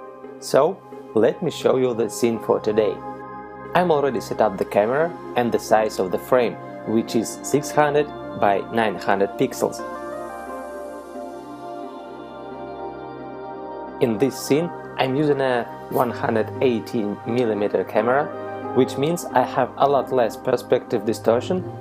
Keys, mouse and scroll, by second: 1.7 middle click, 3.9 KP_0, 7.4 click, 16.9 right click, 17.4 right click, 18.5 click.